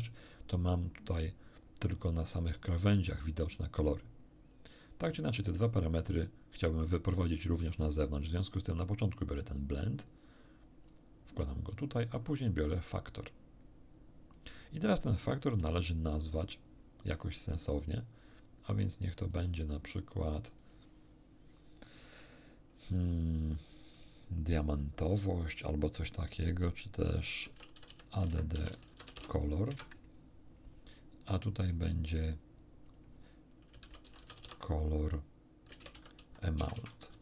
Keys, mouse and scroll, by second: 6.6-8.0 middle drag, 9.1-11.1 drag, 12.8-14.5 drag, 15.5 n, 17.7 click, 18.3 click, 19.2 click, 20.6 click, 27.4-29.7 typing, 29.7 Return, 31.5 click, 32.9 click, 33.8 c, 34.1 o, 34.2 l, 34.3 o, 35.7-37.2 typing.